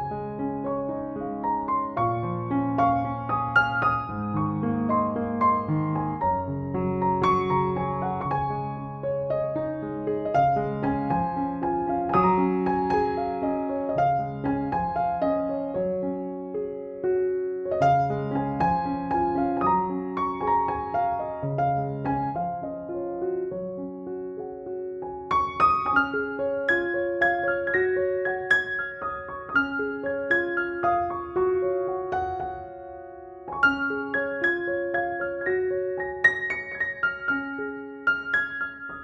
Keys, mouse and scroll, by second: 0.2 shift+click, 0.3-1.3 shift+click, 1.8-2.9 drag, 5.7-7.4 typing, 7.5-8.9 drag, 8.9 [, 9.1 [, 9.3 [, 9.7 click, 10.3 [, 11.2 ctrl+z, 12.7 click, 14.9 space, 15.1 click, 15.3-15.6 space, 16.5 ctrl+click, 17.3 ctrl+e, 18.0 click, 20.4 ctrl+=, 21.4 space, 21.4 click, 21.7-23.0 space, 23.5 ctrl+j, 24.1 alt+t, 24.8 click, 31.0 click, 33.4 alt+click, 33.9 space, 35.2 alt+click, 35.5 space, 35.7-36.2 click, 36.1 b, 37.3 ], 37.6 ], 37.7 ], 37.9 ], 38.0-39.0 click.